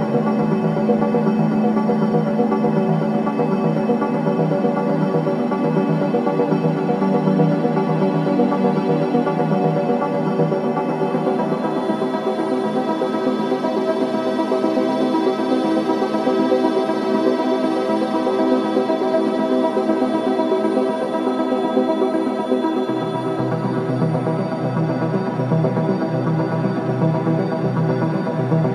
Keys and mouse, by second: 0.4-2.8 drag, 4.6 space, 6.1 click, 8.7 g, 9.1 x, 10.6 click, 11.2 click, 11.7 space, 15.2 space, 16.7-17.9 alt+drag, 18.7-20.0 drag, 20.2 ctrl+z, 20.9 ctrl+z, 23.0 click, 24.2 alt+click, 27.4 Home.